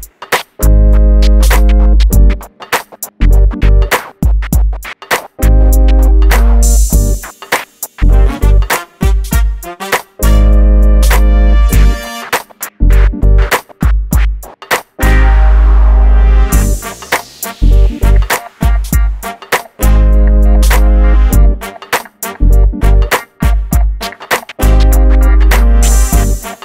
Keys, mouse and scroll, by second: 0.7 click, 5.7 scroll down 1, 6.8-7.1 scroll up 1, 7.3 scroll down 1, 10.4 click, 10.9 scroll down 1, 11.2 shift+middle click, 11.7-12.9 scroll up 1, 12.9 click, 13.8 middle click, 14.6-14.9 scroll up 1, 14.9 middle click, 16.2 m, 18.0-21.3 ctrl+drag, 21.4 ctrl+click, 21.8 shift+middle click, 24.4 click, 25.6 middle click.